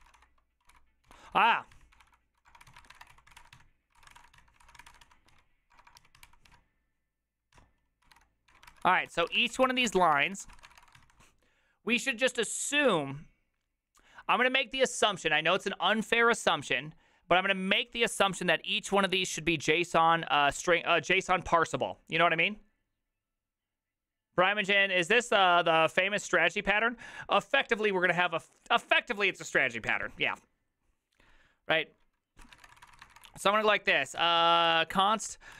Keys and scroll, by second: 0.0-11.5 typing, 32.4-35.5 typing.